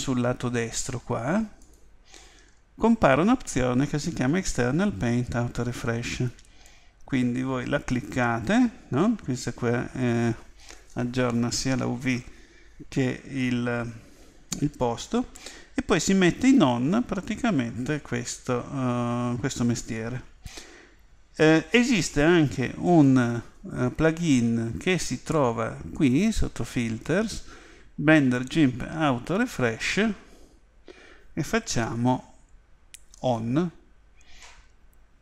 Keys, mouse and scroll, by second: 1.6 click, 2.5-4.9 middle drag, 6.3-9.8 drag, 16.4 click.